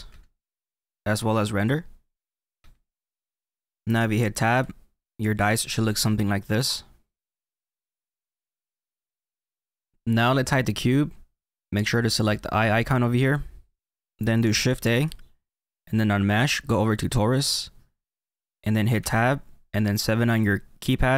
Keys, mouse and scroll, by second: 1.5 click, 4.6 Tab, 6.0 middle click, 13.2 click, 14.7 shift+a, 18.9 Tab, 21.0 KP_7.